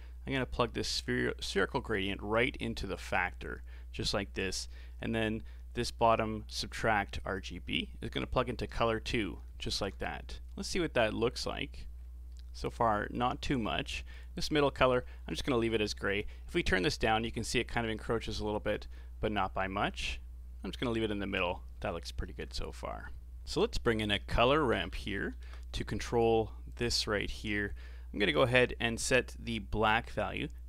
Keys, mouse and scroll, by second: 2.3 click, 7.4 click, 8.8 middle click, 9.6 ctrl+shift+click, 12.0 scroll up 3, 12.3-14.1 middle drag, 14.1 click, 22.2-22.6 scroll down 4, 22.6-23.7 middle drag, 23.7 shift+a, 25.3 r, 27.7-28.3 scroll up 1, 28.3-30.6 middle drag.